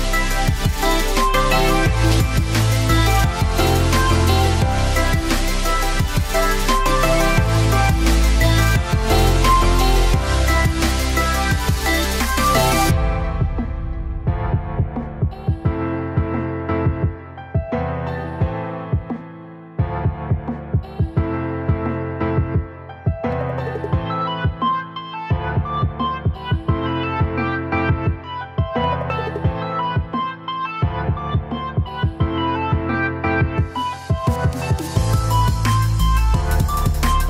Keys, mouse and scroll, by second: 0.6 g, 2.4 click, 4.1 g, 8.0 click, 10.0 f, 10.2 g, 12.4 click, 13.7 g, 16.7 click, 18.0-19.5 drag, 19.5 g, 22.6 click, 24.1 g, 27.4 click, 27.9 click, 29.7 Tab, 30.4 g, 31.8 Tab, 32.6 click, 33.4 click, 34.7 click, 36.4 click.